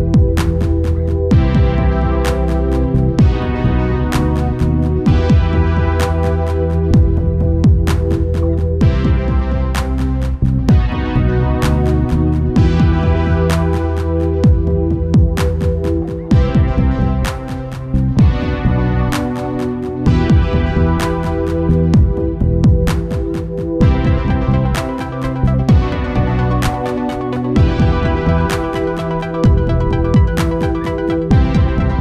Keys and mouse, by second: 0.8-2.2 drag, 4.1-8.3 right drag, 4.4-8.4 drag, 8.7 Right, 11.6-13.4 drag, 13.3 middle click, 13.6-15.5 drag, 15.6 click, 18.3-23.1 drag, 23.3-25.0 drag, 26.3 ctrl+s, 26.9 KP_0, 28.2-29.8 drag, 29.6 shift+f.